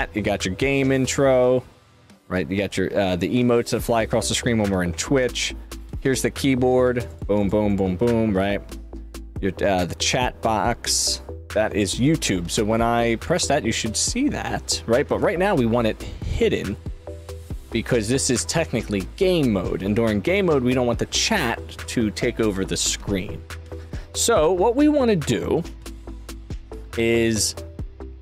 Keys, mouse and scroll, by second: 17.9-28.0 drag.